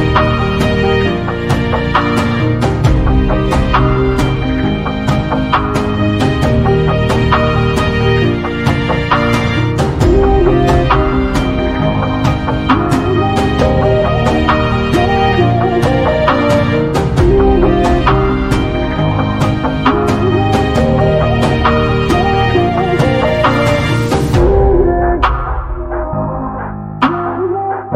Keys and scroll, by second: 2.1 p, 4.7 space, 11.7 space, 14.8 8, 15.3 Return, 19.1 5, 19.4 0, 19.8 Return, 23.8-25.1 typing.